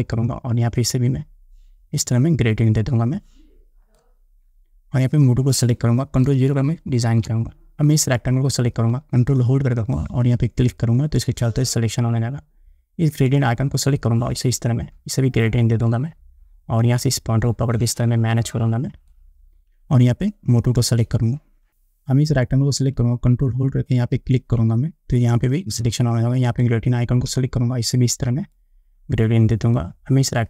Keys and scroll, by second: 7.2 ctrl+0.